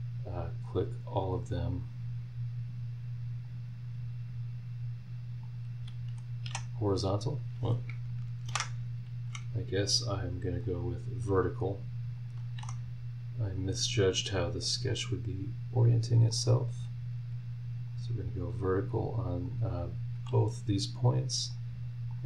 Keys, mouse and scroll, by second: 1.2 click, 3.4 click, 5.4 click, 6.4 h, 8.5 ctrl+z, 10.6 click, 12.2 click, 12.6 v, 13.7 click, 14.9 click, 16.3 click, 17.9 click, 19.4 click, 20.1 v, 21.5 click, 22.1 click.